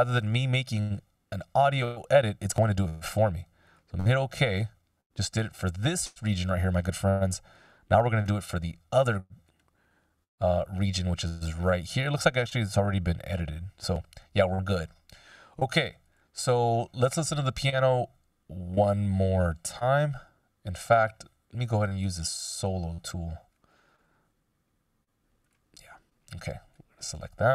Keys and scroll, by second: 7.4 ctrl+alt+super+m, 10.8 BackSpace, 20.2 Down, 20.7 Up, 23.1 s.